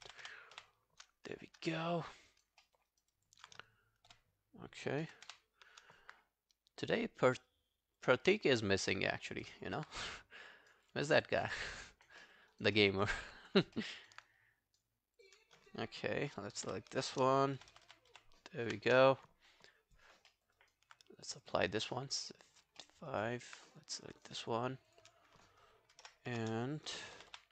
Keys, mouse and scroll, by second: 0.1 shift+., 0.6 shift+., 2.0 alt+scroll down 1, 2.0 alt+click, 2.3 alt+right click, 2.6 alt+middle click, 2.9 alt+right click, 3.1 alt+click, 5.3 shift+., 9.3 alt+scroll down 1, 9.5 alt+click, 10.2 right click, 11.2 double click, 11.4 scroll down 2, 11.7 alt+middle click, 11.9 alt+right click, 12.2 alt+middle click, 12.5 alt+right click, 12.8 alt+middle click, 13.0 alt+right click, 13.8 alt+middle click, 14.0 alt+right click, 14.3 right click, 15.3 double click, 16.7 ctrl+F11, 17.7 shift+., 18.1 shift+., 18.7 shift+., 19.7 alt+click, 20.3 alt+middle click, 20.6 alt+right click, 21.7 alt+scroll down 2, 21.9 alt+middle click, 22.2 alt+right click, 22.4 alt+click, 22.8 alt+middle click, 23.1 alt+right click, 25.0 double click, 26.0 ctrl+F11, 27.0 shift+., 27.3 shift+..